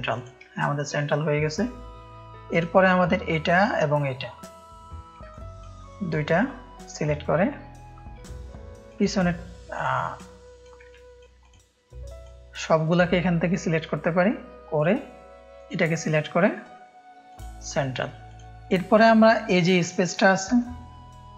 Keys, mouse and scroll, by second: 0.5 space, 0.6 click, 1.2 click, 3.5 shift+click, 5.3 click, 5.3 space, 8.8 click, 9.7-10.6 drag, 10.8 space, 10.9 click, 11.4 drag, 12.2-14.2 drag, 15.5 click, 18.2 click, 19.8 ctrl+space, 19.8 ctrl+click, 20.6 click, 20.6 space.